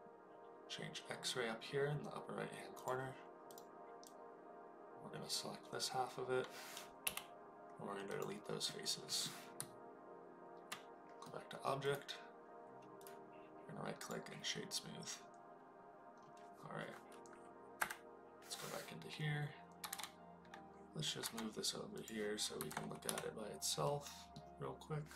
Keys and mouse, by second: 2.7 click, 4.1-5.8 drag, 7.0 Delete, 8.6 middle click, 9.5 Tab, 11.2-11.6 middle drag, 11.9 right click, 12.9-14.1 right drag, 19.7 g, 19.9 z, 21.2 x, 21.9 click, 22.5 KP_1, 23.0 KP_Decimal, 23.9-24.3 middle drag.